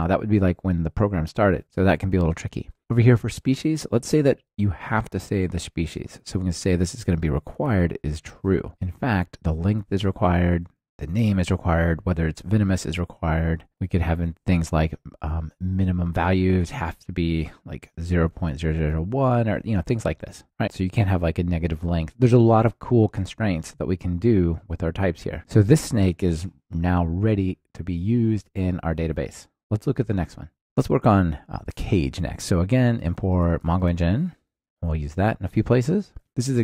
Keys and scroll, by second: 7.3 Return, 8.7 ctrl+alt+shift+Left, 8.7 super+c, 9.6 super+v, 34.0 Return, 34.8 Return, 35.0 super+c, 36.2 ctrl+alt+shift+Left.